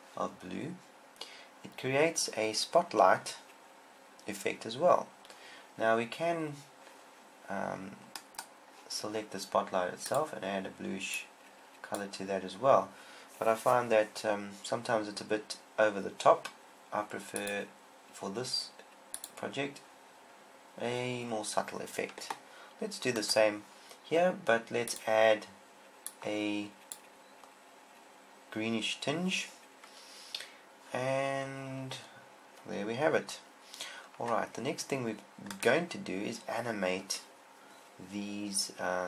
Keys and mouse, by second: 9.6-11.6 right drag, 11.7-13.0 drag, 13.1 click, 16.5-19.6 drag, 27.5-31.3 drag, 34.8-35.9 drag, 35.9-38.1 right drag.